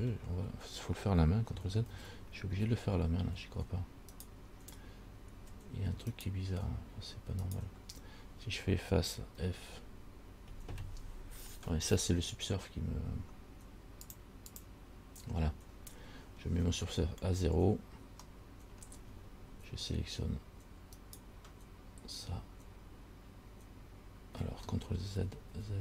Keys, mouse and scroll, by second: 2.1 ctrl+z, 2.8 scroll up 2, 4.4 alt+right click, 6.4 right click, 7.6 right click, 9.7 f, 14.2 click, 14.7 click, 15.9-17.9 scroll down 1, 17.9 scroll down 1, 21.2 alt+right click, 25.4 ctrl+z, 25.7 ctrl+z.